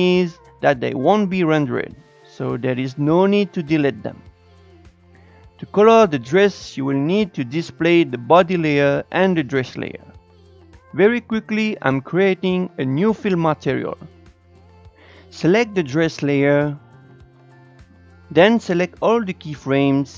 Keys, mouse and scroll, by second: 2.7 click, 9.9 click, 10.3-13.8 drag, 14.3 s, 15.7 click, 18.2-20.1 drag.